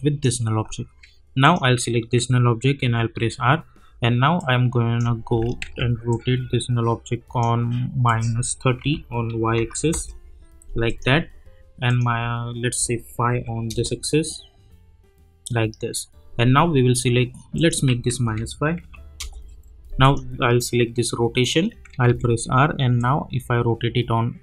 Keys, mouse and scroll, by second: 2.8 r, 4.4 click, 5.6 ctrl+z, 6.1-8.0 drag, 8.8 -, 9.9 Return, 10.8 click, 13.7 Return, 17.5 click, 18.2 -, 19.2 Return, 20.0 click, 22.1 r, 23.0-24.4 drag.